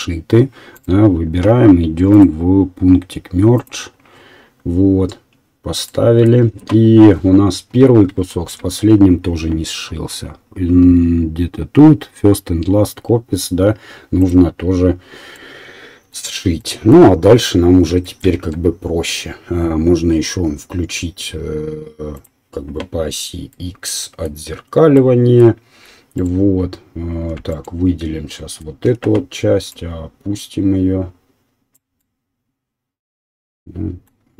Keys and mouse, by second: 0.7 click, 0.8 middle click, 2.1-3.7 drag, 3.9-14.2 middle drag, 14.2 right click, 14.8-22.1 middle drag, 15.2 KP_7, 18.3 Tab, 22.1 click, 22.3-26.1 middle drag, 26.3-27.5 alt+middle drag, 27.7-29.7 alt+middle drag, 28.8 2, 29.7-34.3 right drag.